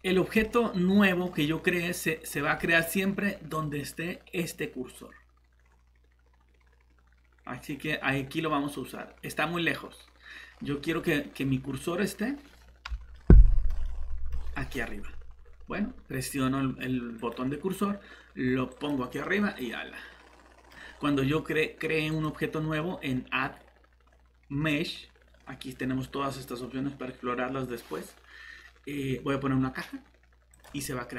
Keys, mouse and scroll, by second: 0.4 middle click, 1.2 scroll up 1, 2.2-2.6 scroll down 1, 2.6 middle click, 10.5 scroll up 1, 13.1 middle click, 13.4-13.8 typing, 17.2 click, 19.2 middle click, 20.8 scroll down 1, 22.1 click.